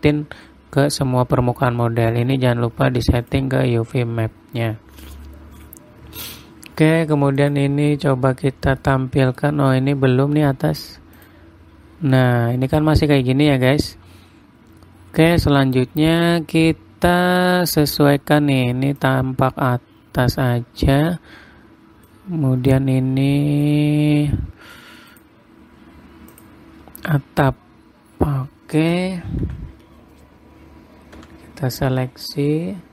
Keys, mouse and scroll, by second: 2.6 click, 8.4 click, 9.3 middle click, 10.4-11.0 scroll up 6, 11.7 click, 12.7 middle click, 13.1-13.5 scroll up 3, 13.5 scroll down 3, 15.3 middle click, 19.5 click, 20.4-21.0 scroll up 4, 21.0-21.8 scroll down 2, 22.7 click, 27.9-28.2 scroll down 4, 28.2-28.9 scroll up 2, 30.0 Tab, 31.8 a.